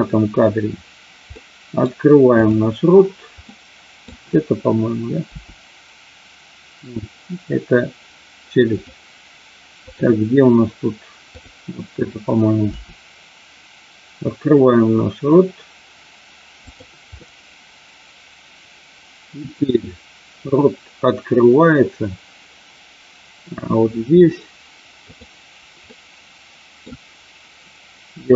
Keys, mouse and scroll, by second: 1.3 middle click, 3.4 middle click, 5.3 r, 8.7 click, 11.2 click, 12.6 r, 16.7 click, 17.2-24.2 middle drag, 25.0 click, 25.8-26.8 middle drag.